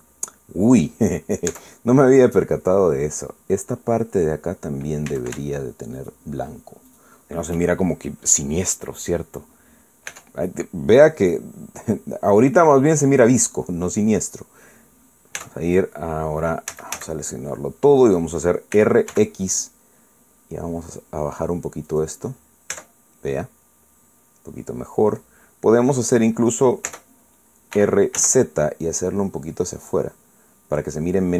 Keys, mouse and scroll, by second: 0.1 scroll down 1, 0.5-0.8 scroll up 1, 0.9 scroll down 1, 2.5 Tab, 3.2 scroll up 1, 6.1 a, 7.0 alt+shift+right click, 7.9 alt+shift+right click, 9.6 click, 10.3-10.7 scroll down 1, 10.7-11.1 scroll up 1, 11.1 Tab, 11.5-11.9 scroll down 1, 12.3-14.2 middle drag, 14.3 scroll down 1, 14.4 scroll up 1, 14.7-15.2 scroll down 2, 15.2 scroll up 2, 16.4 Tab, 17.7 a, 19.7 r, 20.1 x, 22.9 click, 23.7 Tab, 24.2-24.6 scroll down 1, 25.2-25.7 scroll up 1, 28.7 r, 29.2 z.